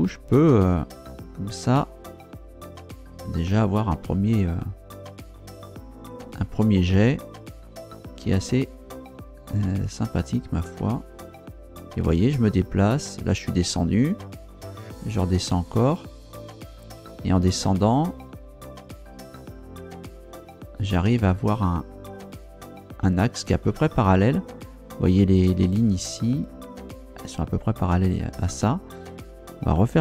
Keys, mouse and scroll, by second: 8.3 Down, 12.3 Down, 15.7 Down, 23.7 click.